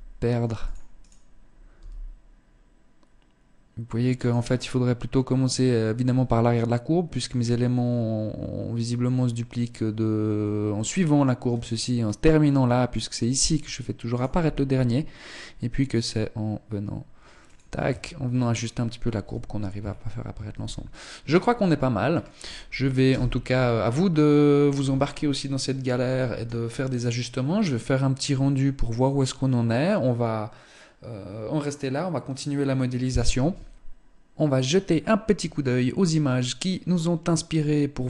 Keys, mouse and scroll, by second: 0.5 right click, 1.2 g, 13.6 right click, 13.9 g, 16.7 Tab, 17.7 scroll down 3, 18.7 z, 19.2-19.9 scroll up 3, 20.0 ctrl+s, 20.9-21.5 scroll down 1, 21.5-22.5 scroll down 1, 22.5 KP_0.